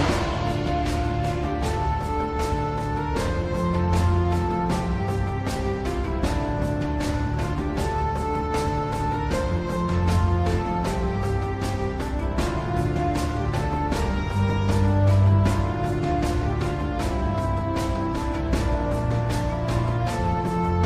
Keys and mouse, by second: 8.8 click, 13.1 click, 13.7 middle click, 19.0 KP_3.